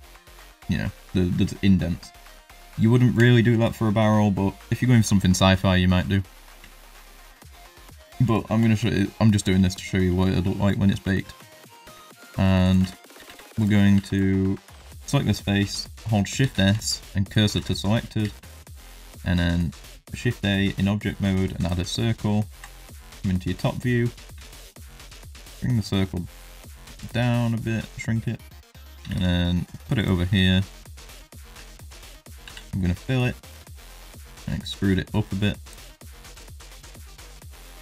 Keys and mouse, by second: 0.6 middle drag, 1.4 shift+middle drag, 1.8 middle drag, 2.5 middle drag, 3.0 shift+middle drag, 3.4 middle drag, 8.3 ctrl+middle drag, 8.7 shift+middle drag, 9.0 middle drag, 9.4 shift+middle drag, 9.6 middle drag, 10.1 shift+middle drag, 10.6 middle click, 11.1 shift+middle drag, 11.6 middle drag, 11.9 shift+middle drag, 12.6 click, 12.8 Tab, 12.9 w, 13.2 3, 13.5 click, 13.9 shift+click, 14.9 w, 16.3 shift+s, 17.5 Tab, 18.2 shift+a, 22.5 KP_7, 24.3 s, 29.0 g, 30.2 shift+middle click, 30.8 shift+middle click, 31.5 Tab, 32.4 f, 33.2 middle click, 33.9 shift+middle click, 34.3 e, 36.0 middle click, 36.5 shift+middle click, 37.0 middle click.